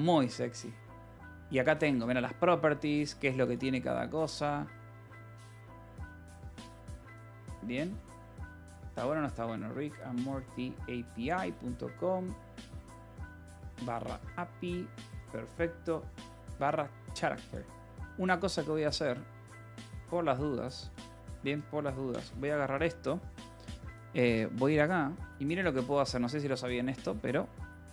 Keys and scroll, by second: 22.6 ctrl+c, 27.1 alt+l, 27.4-27.9 typing.